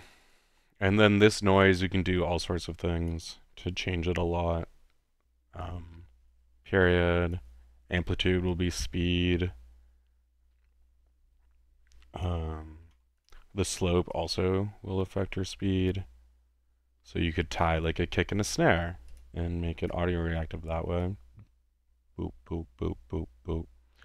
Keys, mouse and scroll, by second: 0.3 click, 1.5 click, 2.6-3.2 drag, 6.8-7.5 drag, 8.5-12.4 drag, 12.8 ctrl+z, 13.2 ctrl+click, 14.1-15.2 ctrl+drag, 17.6 click, 19.2 ctrl+click, 19.8 ctrl+drag, 21.0-24.0 drag.